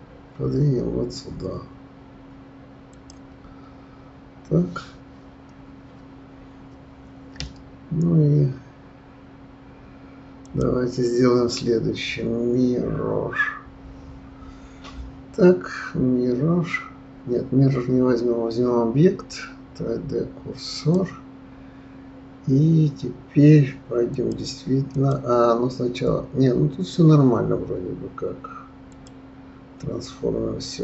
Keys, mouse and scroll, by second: 10.4-13.5 drag, 24.1 click, 28.9 click.